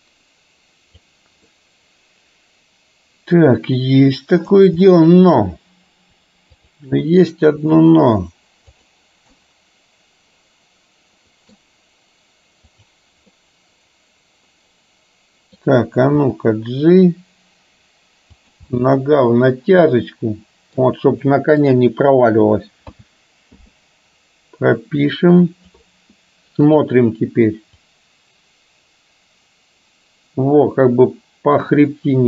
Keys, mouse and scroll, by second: 1.6-3.5 middle drag, 5.0 middle click, 6.6 click, 7.6 r, 9.3-11.6 middle drag, 12.7-13.1 drag, 13.3-15.7 middle drag, 16.3 g, 18.8-20.8 middle drag, 21.3 middle click, 23.0 a, 23.7 i, 25.2 click, 26.7 click, 27.8-32.2 drag.